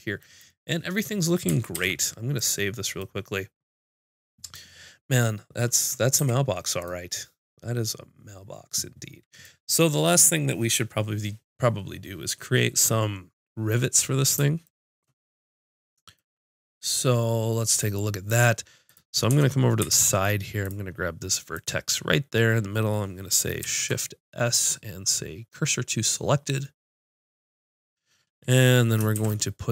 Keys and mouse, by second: 1.7 ctrl+s, 6.2 a, 18.8 click, 19.3 Tab, 19.9 ctrl+Tab, 23.6 shift+s, 29.1 shift+a.